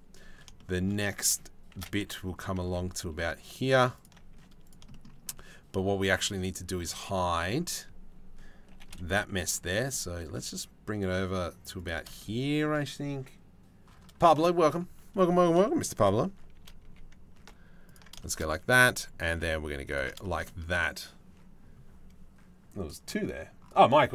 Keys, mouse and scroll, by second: 0.1 shift+middle click, 1.3 shift+d, 3.9 z, 4.5 shift+middle click, 6.6 shift+middle click, 8.3 g, 16.1 shift+d, 18.4 shift+d, 19.8 middle click.